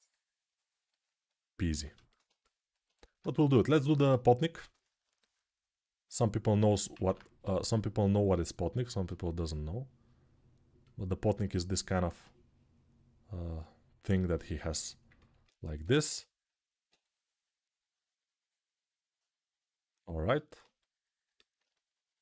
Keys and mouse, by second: 1.0 right click, 3.1 ctrl+Tab, 15.6 m, 15.9-16.6 [.